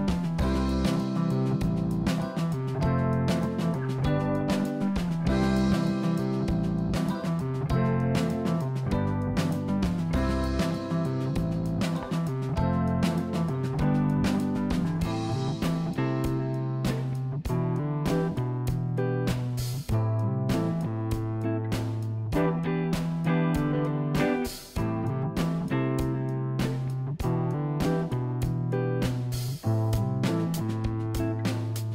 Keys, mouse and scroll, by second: 0.8 click, 1.3 Tab, 2.1 click, 2.8-4.4 middle drag, 4.4 shift+click, 4.5 shift+click, 5.1-6.4 middle drag, 6.4 shift+click, 7.0 shift+click, 7.1 shift+click, 7.7-9.4 middle drag, 9.6 ctrl+b, 15.1 click, 15.9-19.1 middle drag, 19.1-19.8 scroll down 3, 19.8 middle click, 20.5 Tab, 20.7 click, 21.1-22.7 middle drag, 23.1 click, 25.6 shift+click.